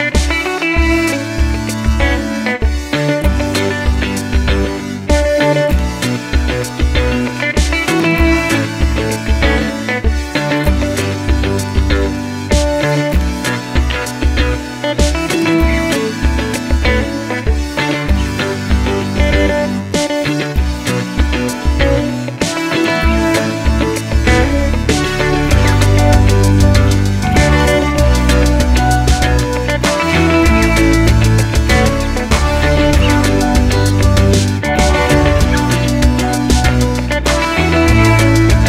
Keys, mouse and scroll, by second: 0.2 KP_Enter, 0.5 shift+middle click, 0.8 scroll up 1, 1.0 shift+middle click, 3.1-4.7 shift+middle drag, 3.4-4.7 scroll up 2, 4.7 click, 5.2 g, 6.9 g, 8.5-10.6 middle drag, 8.8-9.5 scroll down 2, 10.6 click, 11.0 a, 11.3 scroll down 1, 12.0 scroll up 1, 12.3 shift+click, 12.5 shift+click, 12.8 shift+click, 13.6 shift+click, 13.8 shift+click, 14.7 shift+click, 15.5 KP_7, 15.9 scroll up 1, 16.6-19.8 shift+middle drag, 17.1 g, 19.8 click, 20.4 g, 22.7 click, 22.9-25.9 middle drag, 23.9 scroll down 1, 24.6 KP_0, 25.9 click, 26.2 g, 26.9 click, 27.6 click, 28.0 a, 28.6 click, 29.0 g, 30.6 click, 30.7 scroll up 1, 31.0 scroll down 1, 31.7-37.0 drag, 33.7 KP_Enter, 34.2 g, 37.7 click, 38.2-38.6 drag.